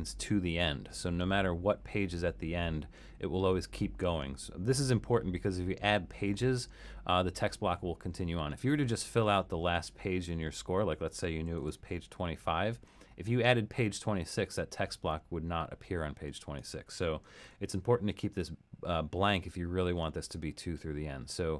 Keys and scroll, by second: 11.3-12.3 typing, 17.5 BackSpace.